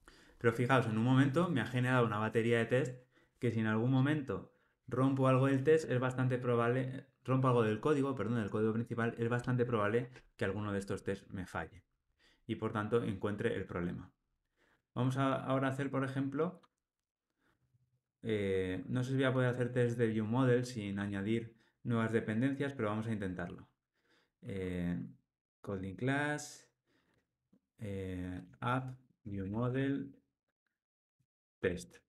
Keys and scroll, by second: 15.3 super+n, 20.9 super+n.